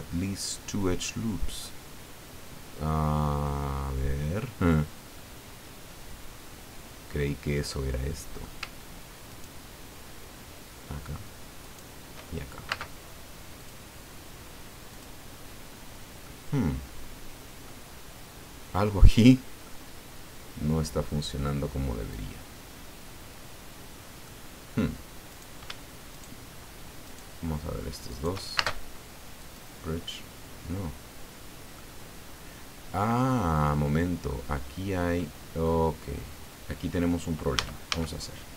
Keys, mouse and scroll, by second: 1.6-3.6 middle drag, 3.8 scroll up 1, 4.3 scroll down 1, 4.7-8.6 middle drag, 9.3 shift+right click, 11.6 shift+right click, 12.7 space, 13.5 click, 14.9 click, 16.2-17.8 middle drag, 18.0-18.5 scroll up 4, 19.0 scroll down 2, 19.6-24.4 middle drag, 25.3 right click, 26.1 shift+right click, 27.0 shift+right click, 28.1 shift+right click, 28.5 shift+space, 29.4 click, 30.8-31.9 drag, 32.2-32.7 scroll up 2, 33.0 scroll down 1, 33.7 middle click, 35.2 scroll down 2, 35.6-37.6 middle drag, 37.6 a.